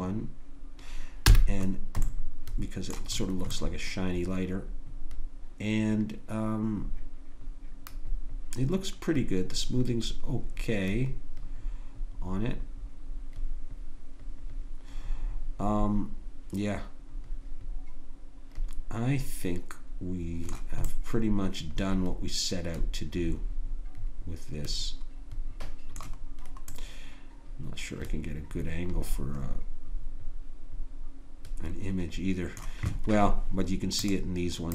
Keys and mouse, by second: 1.3 n, 1.7 middle click, 20.9-22.9 middle drag, 27.0-28.5 middle drag.